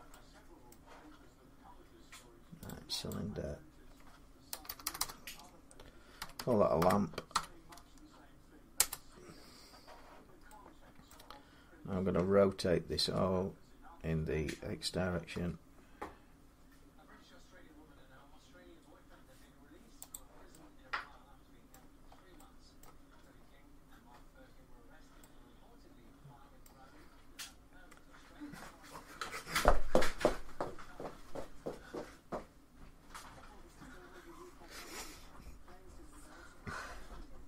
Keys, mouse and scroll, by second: 0.5 middle click, 2.5 click, 2.9 click, 4.3 BackSpace, 4.5 BackSpace, 4.6 BackSpace, 4.8 BackSpace, 6.0-7.1 typing, 8.6 Return, 10.9 middle click, 12.8 r, 13.0-16.0 middle drag, 15.1 x, 19.9-21.0 drag, 21.5 middle click, 21.8-22.2 scroll down 3, 22.6 middle click, 23.0-24.9 scroll up 1, 25.3 scroll down 1, 26.4 middle click, 28.0-31.6 middle drag.